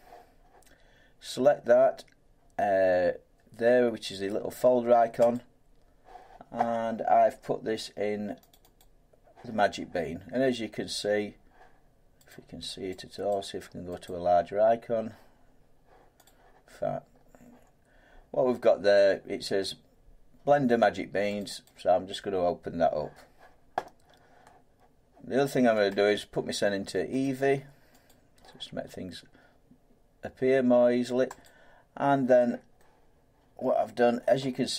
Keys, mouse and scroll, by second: 5.3 click, 8.5 click, 8.8 click, 12.3 click, 13.3 click, 14.0 click, 16.3 click, 17.1 scroll, 21.4 click, 21.7 click, 25.9 click, 27.2 click, 28.1 click, 31.4 click.